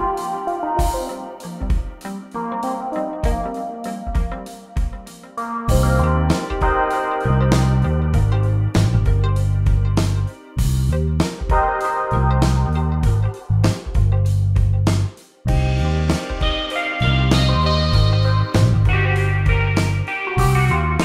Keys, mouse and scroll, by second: 12.0 click, 20.7 click.